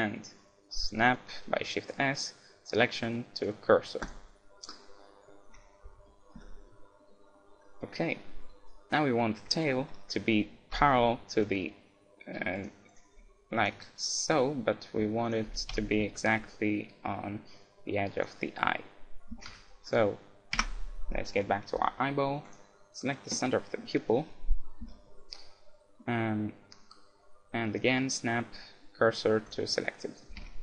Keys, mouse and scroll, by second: 4.6-12.0 middle drag, 5.5 z, 6.3 z, 10.8 KP_7, 12.6-15.3 right drag, 13.1 r, 13.8 g, 15.3-17.2 drag, 15.7 KP_3, 16.2 g, 18.2-19.7 drag, 19.3 Tab, 19.5 z, 20.0-21.1 right drag, 20.6 Tab, 21.1-23.6 middle drag, 22.5-24.2 right drag, 24.9 shift+s, 30.1 middle click, 30.3 a, 30.5 Tab.